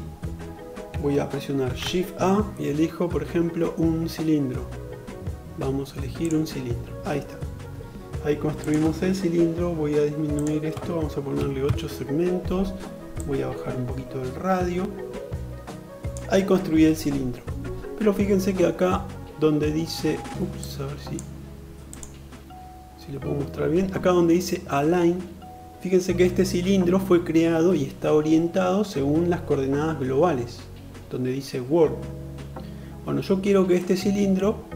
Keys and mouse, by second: 1.3 shift+a, 8.2-34.7 drag.